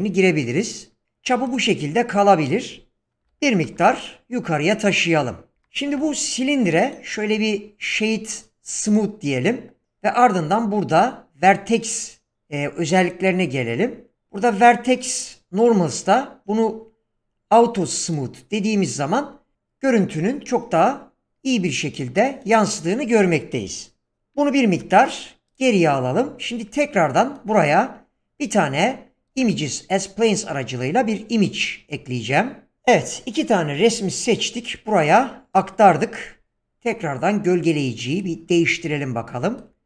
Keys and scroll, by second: 3.2-3.7 typing, 5.5 ,, 24.2 g, 24.8 x, 29.3 shift+a.